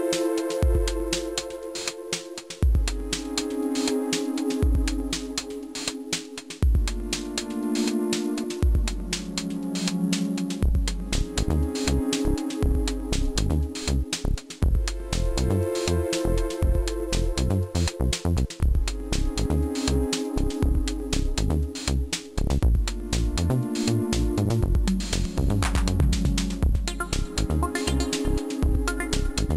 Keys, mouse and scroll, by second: 16.4 click, 18.4 click, 19.9 right click, 21.5 click, 23.1 click, 25.1 right click, 27.0 g.